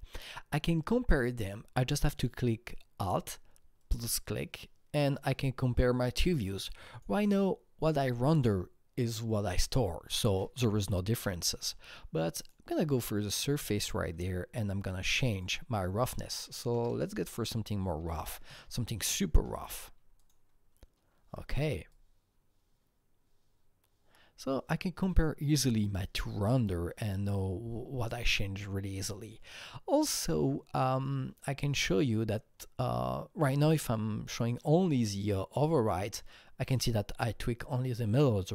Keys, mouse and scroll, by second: 3.0 alt+Num_Lock, 3.0 click, 3.8-9.5 alt+drag, 12.4-14.0 alt+drag, 13.7-15.0 scroll down 5, 15.1 click, 15.3 double click, 16.7 KP_0, 16.9 KP_Decimal, 17.9 KP_8, 18.4 KP_Enter, 20.1 click, 21.9-30.5 alt+drag, 30.0-31.1 scroll up 8, 35.7 click, 35.7 scroll up 1.